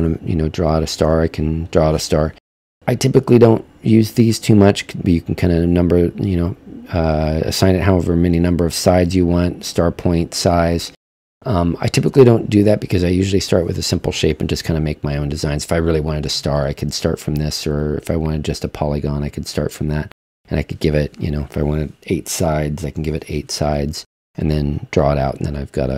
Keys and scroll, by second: 23.0 8.